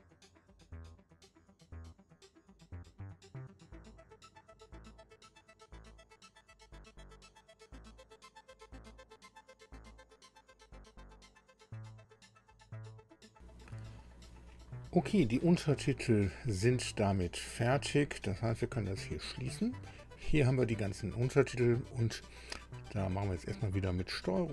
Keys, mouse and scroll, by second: 5.5 click, 19.0 click, 24.3-24.5 ctrl+scroll up 2.